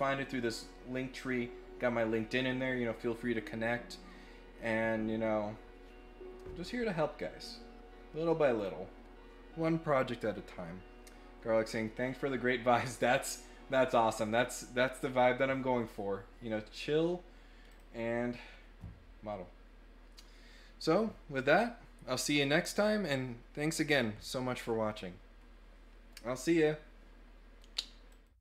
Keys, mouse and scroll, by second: 8.5 click, 17.7 click.